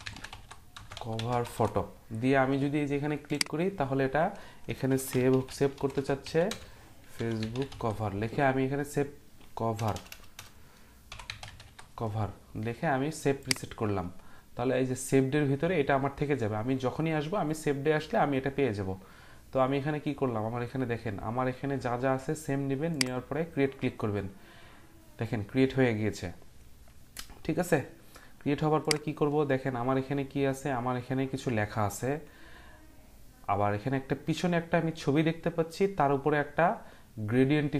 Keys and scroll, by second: 0.0-2.0 typing, 4.7-8.3 typing, 9.7-12.1 typing, 17.3-18.0 typing.